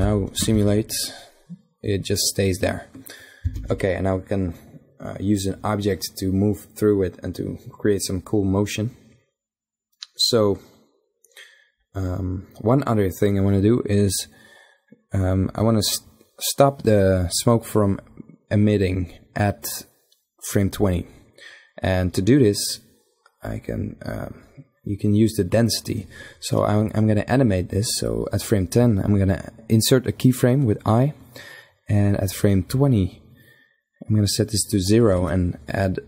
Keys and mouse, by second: 0.1 alt+a, 3.3 alt+a, 13.8-15.3 drag, 23.2-25.0 drag, 29.5 i, 32.2-35.6 drag.